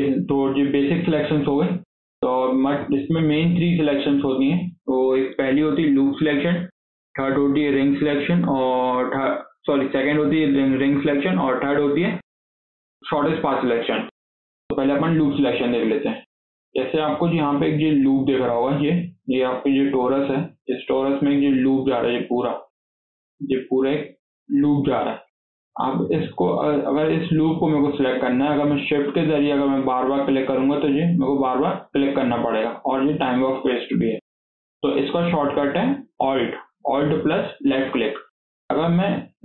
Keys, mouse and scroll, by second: 1.8 scroll up 3, 2.1 middle click, 3.0 KP_7, 3.5 scroll down 4, 3.8-7.3 shift+middle drag, 14.5-14.8 scroll up 3, 14.8 shift+middle click, 15.2 scroll down 1, 15.4 shift+middle click, 15.8 scroll up 3, 16.0-20.8 shift+middle drag, 20.8 alt+z, 21.1-24.9 middle drag, 24.9 alt+z, 25.1 middle click, 25.5 scroll up 1, 25.7-28.5 shift+middle drag, 28.5 click, 28.8 scroll down 3, 28.9-29.7 shift+middle drag, 29.7 shift+drag, 30.1 shift+drag, 30.6 shift+click, 31.0-31.7 middle drag, 31.7 shift+click, 32.1-33.8 shift+middle drag, 33.8 scroll up 2, 34.0 shift+middle click, 34.6 KP_7, 35.2 scroll down 3, 35.3-37.9 shift+middle drag, 37.9-38.3 scroll up 1, 38.3 shift+middle click, 38.6-38.9 scroll up 3, 38.9-39.4 shift+middle drag.